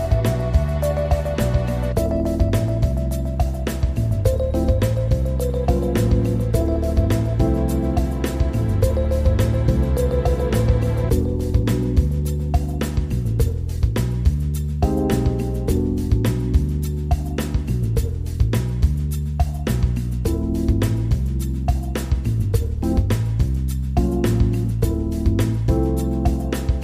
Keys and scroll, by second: 0.0 ctrl+=, 1.8 ctrl+0, 9.9 ctrl+=.